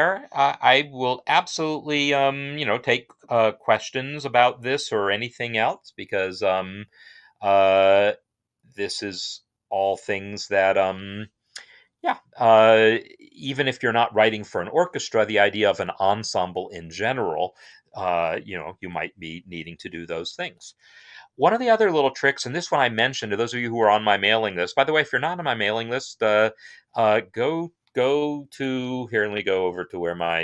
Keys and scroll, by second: 13.8 Escape.